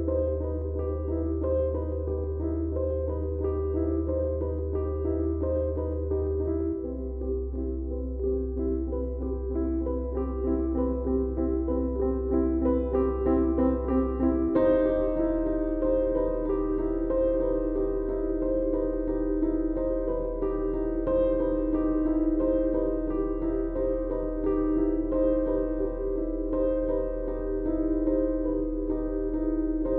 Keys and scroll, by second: 0.3 4, 0.9 3, 2.2 4, 2.9 shift+i, 8.2 F3, 12.3 ctrl+d, 12.3 Escape, 13.2 ctrl+d, 13.3 Escape, 26.6 ..